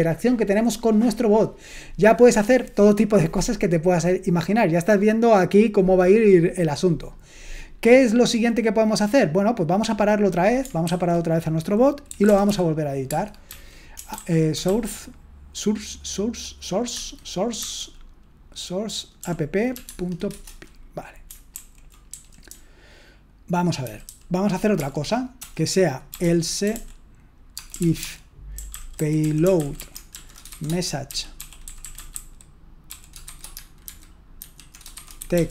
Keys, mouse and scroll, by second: 10.9 ctrl+c, 11.9-15.0 typing, 17.6 a, 19.8 Tab, 19.8 typing, 20.3 Return, 21.6 ctrl+d, 21.9-24.7 typing, 25.9-35.5 typing.